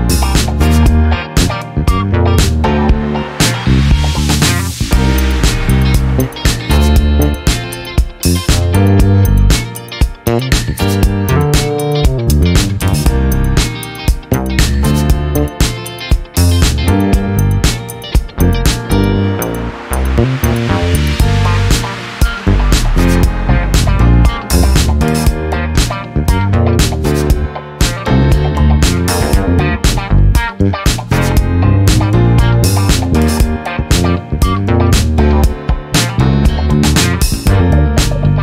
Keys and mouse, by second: 0.2 click, 3.2 space, 3.5 =, 4.8 click, 7.2 click, 7.8 click, 8.9-10.2 drag, 11.1 click, 13.4 ctrl+t, 14.4 click, 15.3 click, 16.4-17.2 drag, 21.6 click, 22.4 click, 23.8 click, 24.7-26.6 drag, 26.8 ctrl+z, 28.0-30.3 ctrl+drag, 30.5 ctrl+click, 31.0 click, 31.8-34.9 ctrl+shift+drag, 35.4 click, 36.1 click.